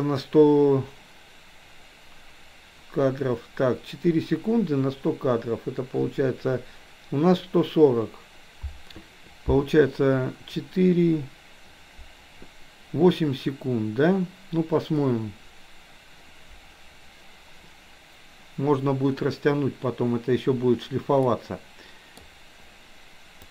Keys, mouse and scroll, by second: 21.1-22.3 middle drag.